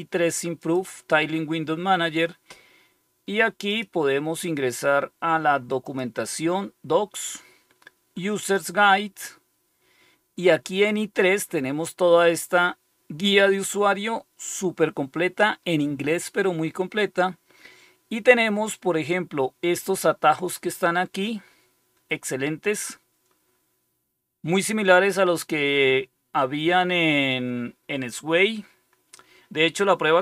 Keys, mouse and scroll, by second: 0.5 click, 3.6 click, 5.8 click, 8.3 click, 11.4 scroll down 1, 12.3-12.7 scroll down 1, 13.8-14.1 scroll down 1, 14.5-15.0 scroll down 1, 15.3-16.5 scroll down 1, 16.5-17.8 scroll down 1, 17.8-18.5 scroll down 1, 18.4-18.9 typing, 18.5-19.3 scroll up 1.